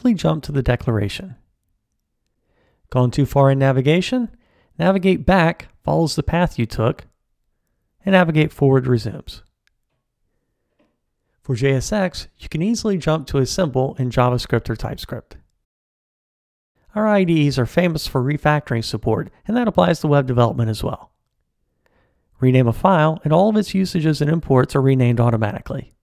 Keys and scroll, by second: 4.0 alt+super+[, 8.2 alt+super+], 12.6 super+b, 22.4 ctrl+alt+t, 22.9 shift+F6.